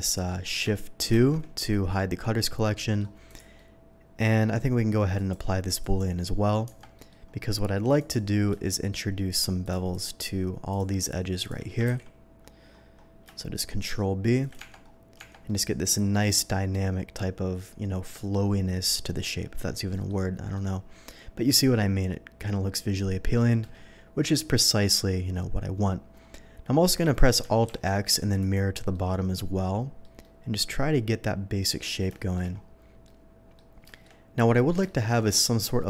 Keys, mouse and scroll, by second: 1.9-2.9 shift+middle drag, 3.2 shift+click, 3.5-4.4 shift+middle drag, 5.1 click, 5.8 click, 6.6 Tab, 6.9 middle click, 7.9 click, 9.6 shift+click, 9.9 shift+click, 10.7 shift+click, 11.0 shift+click, 11.4 shift+click, 11.9 ctrl+b, 12.7 middle click, 12.7 scroll up 1, 14.4 shift+click, 14.8 Tab, 15.2 Tab, 15.4-15.8 middle drag, 19.0-19.6 middle drag, 19.9 middle drag, 20.5-23.3 middle drag, 24.5 KP_3, 26.2 scroll up 1, 27.7 alt+x, 28.4 click, 28.9-30.0 middle drag, 30.2-31.7 middle drag, 30.3 alt+x, 32.1 shift+middle drag, 33.0-33.5 shift+middle drag, 33.9 shift+middle click, 34.3 shift+middle click, 34.8 shift+middle drag, 35.2 shift+middle click.